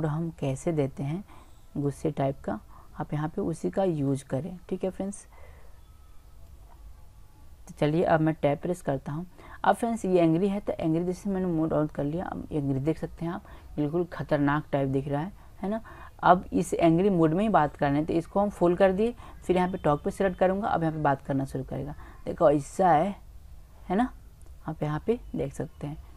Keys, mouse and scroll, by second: 0.1-0.5 drag, 1.8-3.4 drag, 4.9 click, 6.6 middle click, 7.1-8.5 middle drag, 8.5 Tab, 11.1-12.9 drag, 13.3-17.8 middle drag, 19.4-22.4 drag.